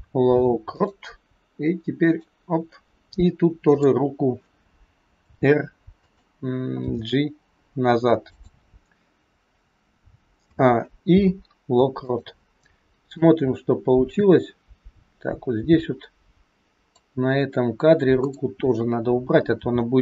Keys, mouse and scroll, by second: 2.0 click, 3.7 click, 5.1 r, 6.7 g, 10.4 a, 11.2 i, 13.1 click, 18.1 click, 19.5 r.